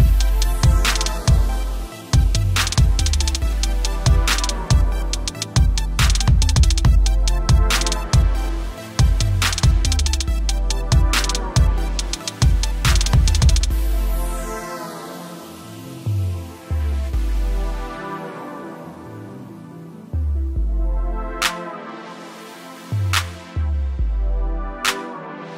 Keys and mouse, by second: 1.6 click, 10.0 space, 11.1 click, 18.5 v, 19.1 click, 21.1 right click, 22.1 click, 24.8 t, 25.3 alt+click.